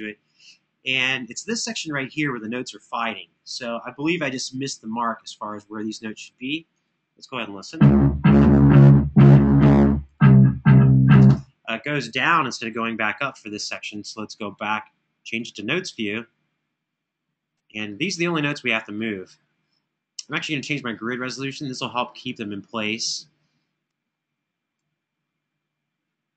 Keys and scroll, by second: 7.5 space, 11.0 space.